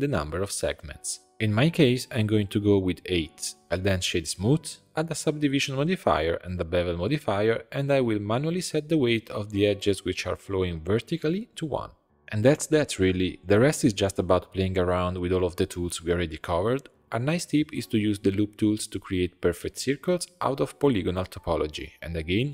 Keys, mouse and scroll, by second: 0.3-3.6 drag, 3.6 Tab, 3.6 right click, 4.2-7.2 drag, 7.9 alt+shift+click, 8.0 middle click, 8.5 alt+shift+click, 8.8 alt+shift+click, 8.9 middle click, 9.6 alt+shift+click, 10.0 alt+shift+click, 10.2 scroll down 1, 10.3 middle click, 11.0 alt+shift+click, 11.4 alt+shift+click, 12.0 click, 12.6 middle click, 13.2 Tab, 13.4 scroll up 2, 13.6 3, 13.9 click, 14.3 shift+click, 15.3 i, 18.8-21.5 right drag, 21.5 s.